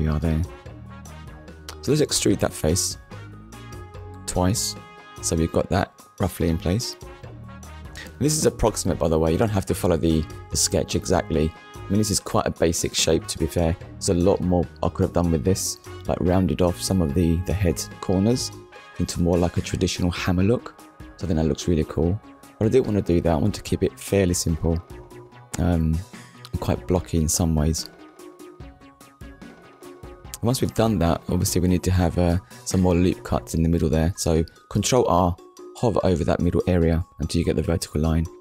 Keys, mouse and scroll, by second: 2.6 click, 6.1 click, 7.3 middle click, 8.7-9.1 scroll down 1, 9.2 shift+middle click, 10.0-10.4 scroll down 1, 10.7 shift+middle click, 12.0 n, 12.9 n, 14.9 click, 15.4 middle click, 17.1 KP_1, 19.2 click, 20.1 shift+middle click, 21.4 click, 22.7 scroll up 1, 27.6 click, 29.5 ctrl+r, 32.2 click, 33.8 right click.